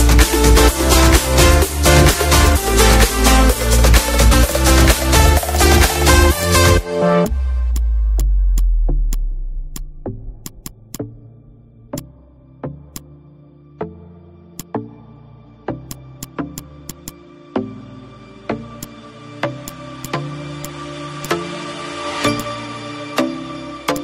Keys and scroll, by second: 0.4 ctrl+d, 4.1 ctrl+shift+a, 6.0 ctrl+g, 10.2 ctrl+z, 13.3 space, 14.1 ctrl+z, 18.3 ctrl+g, 19.2 ctrl+g, 20.4 ctrl+g, 20.9 ctrl+z, 23.6 -.